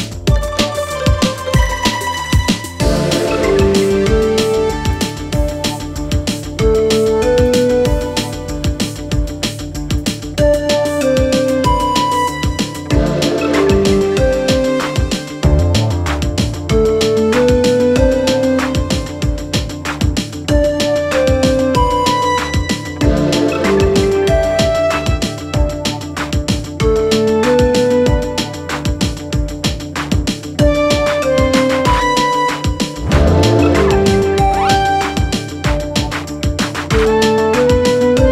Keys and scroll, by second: 0.2 4, 0.6 3, 8.2 5, 10.5 ctrl+d, 10.7 Escape, 11.6 ctrl+d, 11.7 Escape, 15.7 3, 16.2 ], 17.6 4, 23.9 ctrl+d, 24.1 Escape, 28.3 ctrl+z, 28.4 ., 29.8 ctrl+d, 29.9 Escape, 33.2 ctrl+d, 33.3 Escape, 34.2 9, 34.5 0, 34.8 -, 34.9 Return.